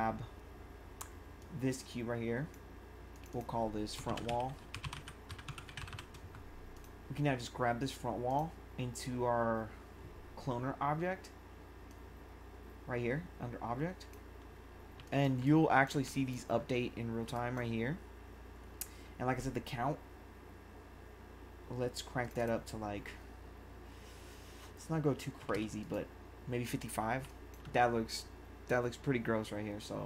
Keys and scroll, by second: 3.8-6.2 typing, 15.0 1, 25.4 5, 27.2 1.